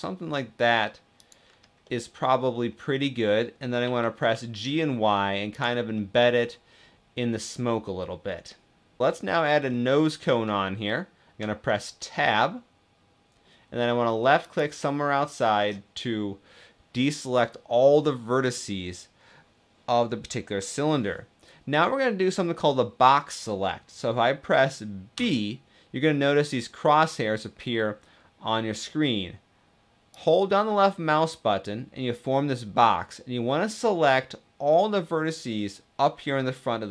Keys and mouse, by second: 1.6 middle click, 2.8 middle click, 3.5 g, 3.8 y, 5.6-9.0 drag, 9.5 click, 9.6-10.1 middle drag, 11.1 Tab, 11.7-13.1 middle drag, 14.1 middle click, 24.8 b.